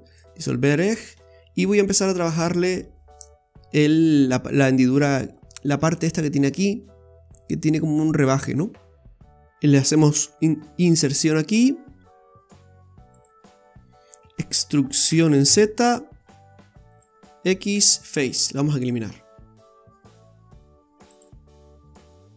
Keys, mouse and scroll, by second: 1.8 click, 2.4 right click, 5.3-5.7 scroll up 4, 5.9 shift+middle click, 6.7 scroll up 2, 8.7-9.1 scroll down 5, 9.1 click, 9.1 middle click, 10.1 typing, 13.5 middle click, 15.1 e, 17.8 x, 21.7-22.2 scroll down 2, 22.0 middle click.